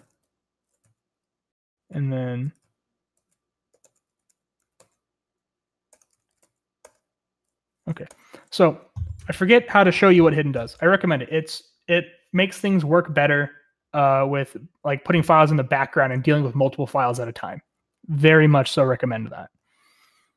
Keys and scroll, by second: 0.0-0.6 typing, 2.5-5.0 typing, 6.1-7.0 typing, 8.1 Up, 8.1 typing, 8.3 Return, 10.6 shift+g, 14.2-16.0 typing, 17.9-20.3 typing.